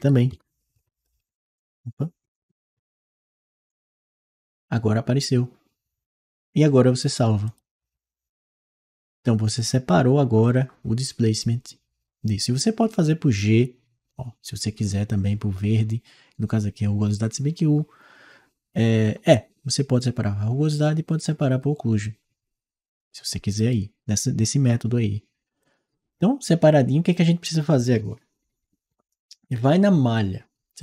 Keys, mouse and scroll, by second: 0.9 0, 2.1 BackSpace, 2.6 5, 3.5 click, 7.3 click, 9.4 click, 10.3-13.3 drag, 23.4 click, 25.4 click.